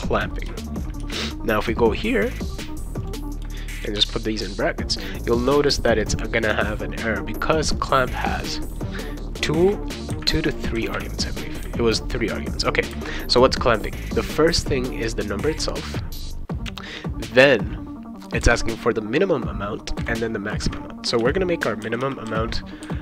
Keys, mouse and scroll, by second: 0.0 Return, 1.0 shift+9, 3.0 click, 4.0 shift+0, 5.4 click, 7.8 click, 8.7 click, 10.8 ,, 10.9 ,, 21.2 0, 21.8 ., 22.3 f.